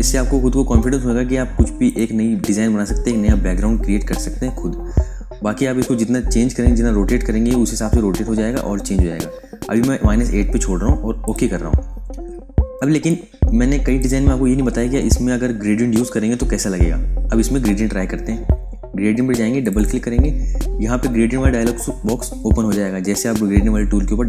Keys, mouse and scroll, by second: 1.8 click, 4.4-5.1 scroll up 1, 5.1 scroll down 1, 5.9-7.9 scroll up 1, 7.9 scroll down 1, 11.1 click, 12.8 space, 13.0 click, 13.4 space, 19.5 click.